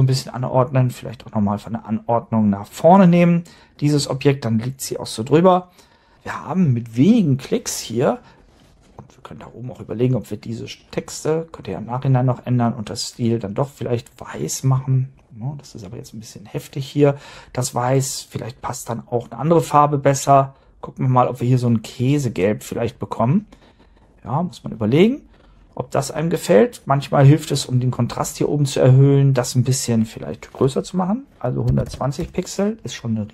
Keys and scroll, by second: 31.9 0, 32.2 Return.